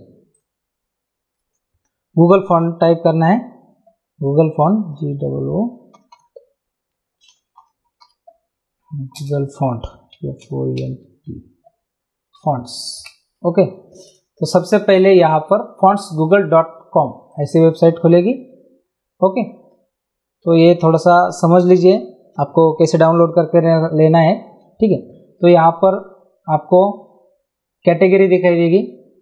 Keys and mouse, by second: 0.3 click, 1.4 Return, 2.6 g, 6.0 o, 7.0-11.3 typing, 12.3 Down, 13.0 Return, 13.0 KP_Enter, 17.3 click.